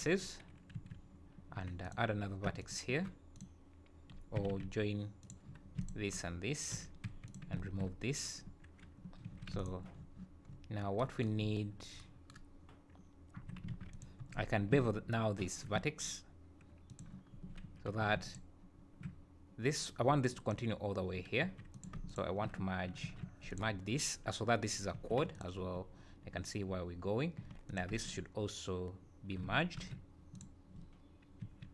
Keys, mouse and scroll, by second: 0.7 3, 1.6 1, 1.8 click, 2.6 shift+click, 3.3 click, 4.4 g, 5.8 shift+click, 6.7 j, 7.1 2, 7.3 click, 7.6 ctrl+x, 9.3 3, 9.6 alt+click, 9.9-10.3 scroll down 5, 10.5 scroll up 3, 11.4-11.9 scroll up 3, 11.9 scroll down 1, 13.4 1, 13.7 alt+a, 13.9 click, 14.3-14.6 scroll up 2, 15.4 ctrl+shift+b, 17.3 scroll down 2, 17.9 3, 18.2 alt+click, 21.4 1, 21.7 click, 22.1 shift+click, 23.0 alt+m, 24.9 3, 25.3 alt+click, 27.4 1, 27.7 click, 28.0 shift+click, 29.7 alt+m, 31.4 g.